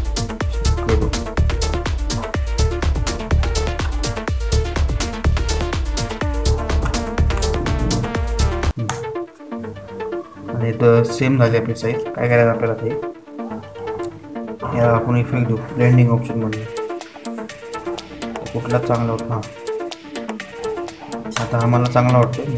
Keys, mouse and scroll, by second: 6.7 click, 8.9 BackSpace, 9.5 7, 10.4 Return, 13.4 click, 13.4 typing, 14.7 typing.